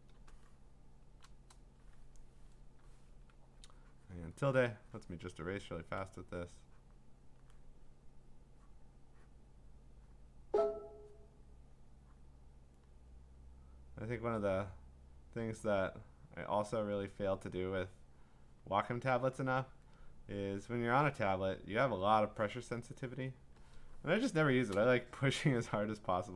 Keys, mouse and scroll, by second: 0.6 click, 0.7-1.0 click, 1.0 click, 1.1 click, 1.2 click, 3.1-5.8 `, 5.8 click, 5.8 `, 5.9 `, 7.3 click, 8.7 click, 9.6 click, 10.1 click, 12.1 click, 14.5 click, 15.5 click, 16.7 click, 17.9 click, 18.2 click, 18.6 click, 18.9 click, 19.5 click, 20.8 click, 21.7 click, 22.7 click, 23.4 click, 24.5 click.